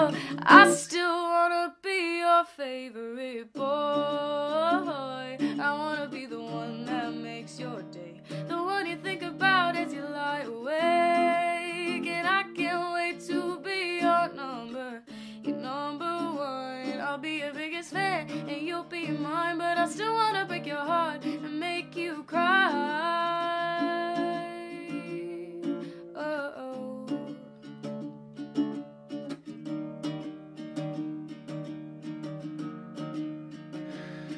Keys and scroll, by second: 8.3 ctrl+z, 11.3 ctrl+z, 21.4 Escape, 24.9 ctrl+z, 30.1 ctrl+z.